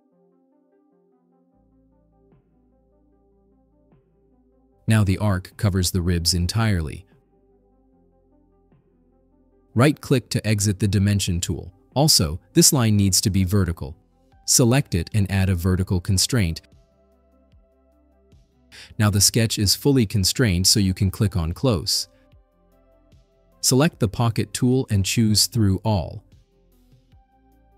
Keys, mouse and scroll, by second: 0.1 click, 0.8-2.6 typing, 5.4-6.2 scroll up 6, 8.6-9.2 scroll down 6, 9.8 scroll up 1, 10.6 right click, 12.7-14.0 drag, 14.8 click, 18.4 click, 21.3 click, 24.6 click, 26.7 click, 27.4 click.